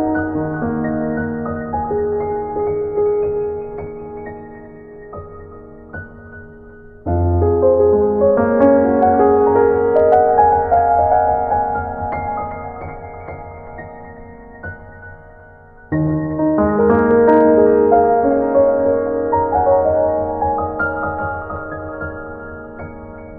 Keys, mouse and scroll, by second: 0.7 right click, 1.1 right click, 1.5 right click, 1.7 z, 2.2 scroll up 1, 2.4-2.8 scroll down 1, 3.5 click, 4.4 scroll down 1, 5.2 right click, 5.6 click, 7.3 click, 7.8 click, 9.3 middle click, 10.4 KP_1, 11.3 ctrl+KP_1, 13.1 middle click, 13.7-14.0 scroll up 2, 14.1 middle click, 15.2 middle click, 16.0 middle click, 16.4 middle click, 16.8 middle click, 17.8 KP_1, 18.4 ctrl+KP_1, 19.0 middle click, 19.3 scroll up 2, 21.4 right click, 22.4 scroll down 1.